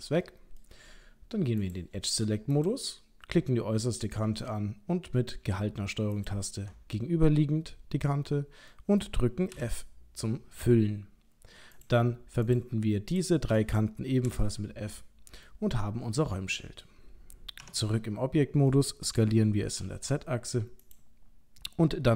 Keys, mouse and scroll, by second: 0.1 middle click, 1.6 click, 2.5 click, 4.2 middle click, 6.2 ctrl+click, 8.3 middle click, 9.4 f, 11.8 click, 12.5 shift+click, 13.1 click, 14.3 f, 15.5 middle click, 17.6 Tab, 18.7 middle click, 19.8 s.